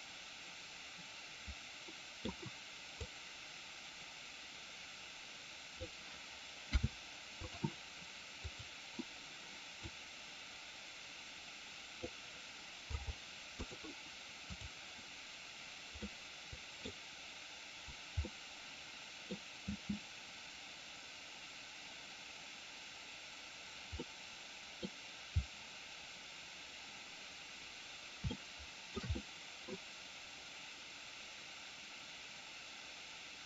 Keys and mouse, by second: 3.1-5.8 drag, 8.4 click, 9.9-11.9 drag, 14.5 click, 16.0-16.9 middle drag, 18.1-19.4 middle drag, 19.5 space, 23.9-24.8 middle drag, 28.3-28.9 shift+middle drag, 29.0-29.6 middle drag.